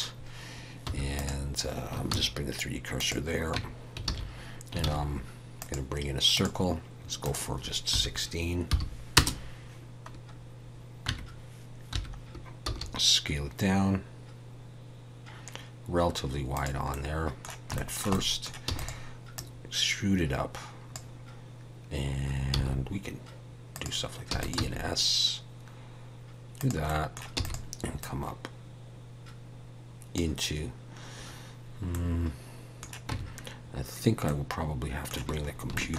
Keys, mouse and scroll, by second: 0.8 3, 1.1 click, 2.1 shift+s, 3.5 Tab, 4.1 alt+a, 4.8 shift+a, 7.2 click, 11.1 Tab, 12.0 1, 12.2-12.6 scroll down 3, 12.6 s, 16.9 middle click, 17.7 shift+middle click, 18.1 middle click, 18.7 e, 19.3 click, 24.3 e, 24.5 s, 26.9 middle click, 27.3 e, 28.0 click, 32.0 middle click, 33.1 Tab, 34.3 middle click, 35.4 scroll up 2, 35.7 shift+middle click.